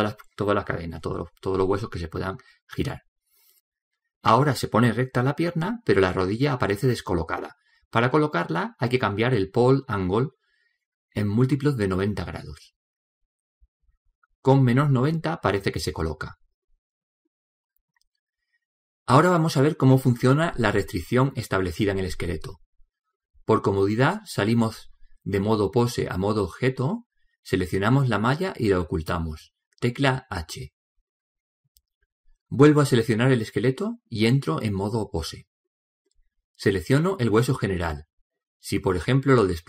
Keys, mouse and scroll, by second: 0.6-13.9 middle drag, 13.9 click, 17.4-19.3 middle drag, 22.5 click, 25.7 right click, 29.7 h, 32.7-33.8 right drag, 33.8 middle click, 34.6 click, 37.8 right click.